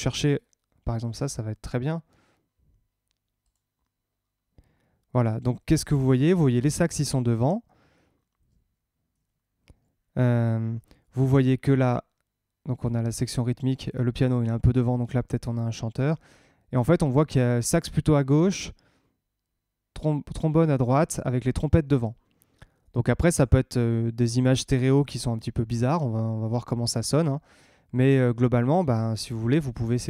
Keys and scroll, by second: 9.1 super+Tab, 10.5 super+Tab, 28.1 super+Tab.